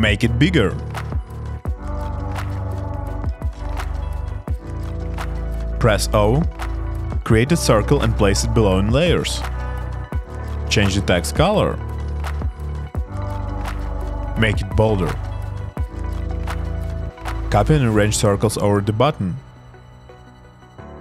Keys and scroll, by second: 0.6 shift+Up, 2.8 shift+Up, 6.0 o, 9.7 alt+super+[.